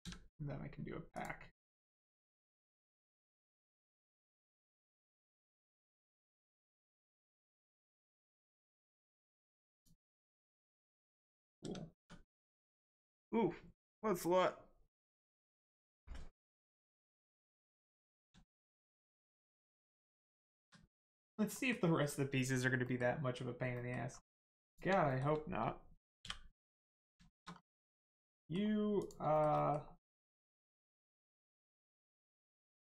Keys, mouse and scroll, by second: 0.0 a, 1.1 click, 5.3 click, 8.0 scroll up 1, 9.7 click, 10.4 scroll down 1, 11.6 Tab, 12.2 click, 12.5-14.5 scroll down 1, 18.0 middle click, 18.4 shift+middle click, 18.6 scroll down 1, 18.8 Tab, 19.0 middle click, 21.0 middle click, 23.7 middle click, 24.0-24.6 scroll up 1, 24.6 click, 25.0 shift+middle click, 26.2 middle click, 27.2 shift+middle click, 27.5 scroll down 1, 27.8 middle click, 28.1 Tab, 28.4 middle click, 29.0 click, 29.3 shift+middle click, 29.5 middle click, 31.4 click.